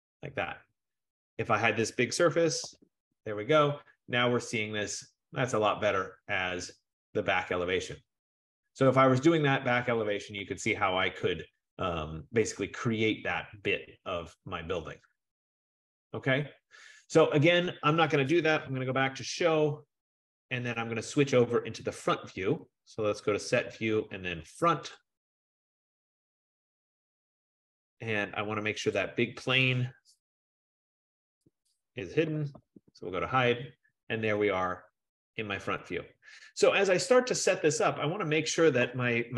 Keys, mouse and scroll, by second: 0.0-0.3 typing, 1.4 click, 2.1-4.9 typing, 6.2 scroll, 6.8 scroll, 8.7 scroll, 13.8 F15, 18.3-19.3 typing, 21.5 click, 25.2 click, 29.1 click, 31.4 click, 32.1-33.4 typing, 35.0 click, 35.3 click, 36.1-36.9 typing.